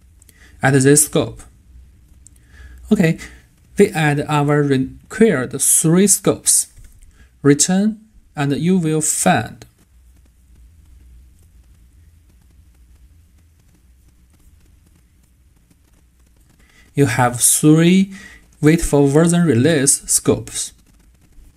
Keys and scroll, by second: 6.7 super+a.